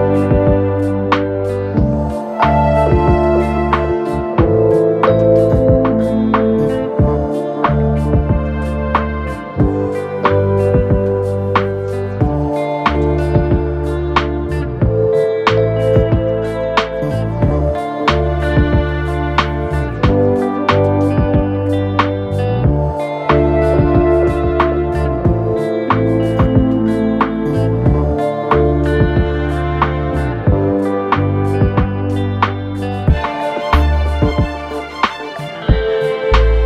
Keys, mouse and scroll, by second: 1.2 Down, 3.4 Down, 3.6 Down, 6.5 typing, 14.6 alt+click, 16.8 typing, 20.0 typing, 21.1-24.6 typing, 33.5 Right, 34.1 space, 35.6 typing.